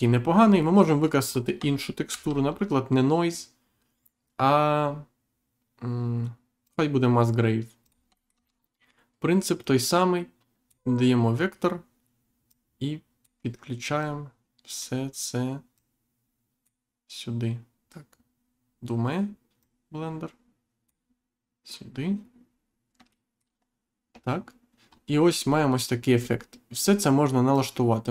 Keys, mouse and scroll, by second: 0.0 scroll up 1, 0.6 middle click, 1.2 scroll down 1, 2.0 shift+a, 6.6 click, 7.8 click, 8.1 shift+middle click, 8.4-8.8 scroll up 1, 9.6 click, 12.4 click, 14.0 click, 15.7 click, 19.6 click, 22.4-22.8 scroll down 1, 23.0 shift+middle click, 24.8-25.2 scroll up 1, 25.3-25.7 scroll down 1, 26.1 scroll up 1, 26.7 scroll up 1, 27.5 click.